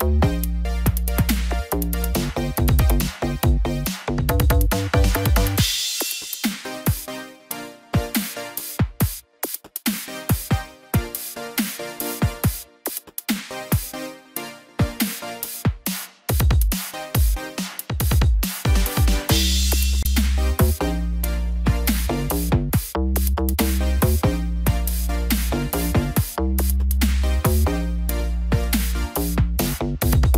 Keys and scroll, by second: 0.1 ctrl+j.